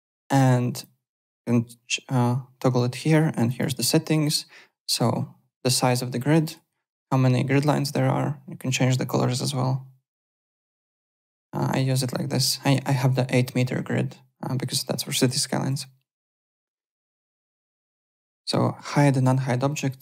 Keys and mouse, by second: 0.7 click, 3.5 click, 6.4 click, 10.6 click, 10.9 alt+click, 11.1 alt+right click, 12.6 alt+click, 12.7 alt+right click, 15.7 alt+Tab, 16.3 click, 17.1 click, 18.3 click.